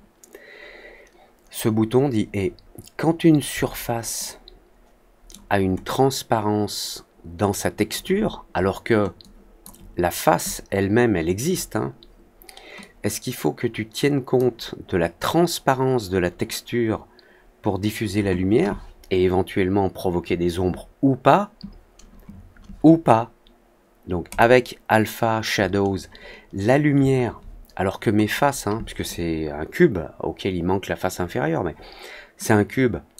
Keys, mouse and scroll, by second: 4.1-5.2 alt+middle drag, 5.8-7.8 alt+drag, 9.1 click, 12.7-14.3 drag, 24.2 click, 28.2 click, 32.3 click.